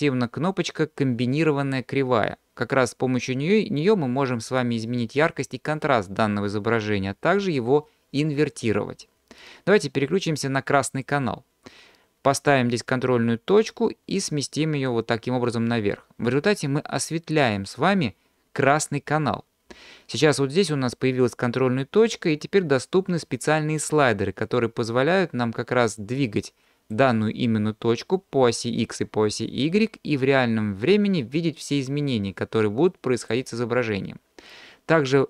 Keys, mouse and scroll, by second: 11.0-13.0 drag, 13.7-15.1 drag, 19.0-22.1 scroll down 2, 23.9-26.9 drag, 27.5-33.3 drag.